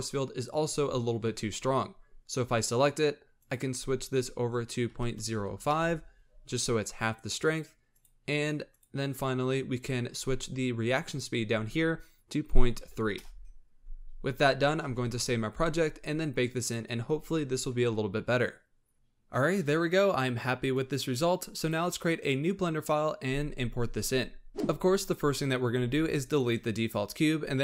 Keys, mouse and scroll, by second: 3.2-6.5 drag, 7.9 click, 8.6 click, 9.4-10.3 scroll down 11, 10.9-14.1 drag, 14.7 ctrl+s, 15.6-16.0 scroll up 5, 16.4-20.5 drag, 21.5-23.9 drag, 24.7 ctrl+z, 25.7 x, 27.5 shift+a.